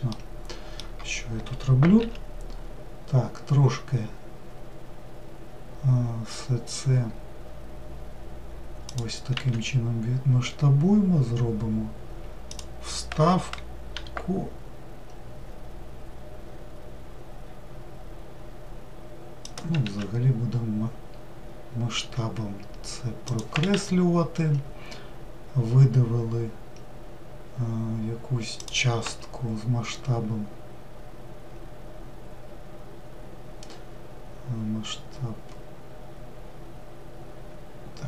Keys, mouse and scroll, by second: 1.7 s.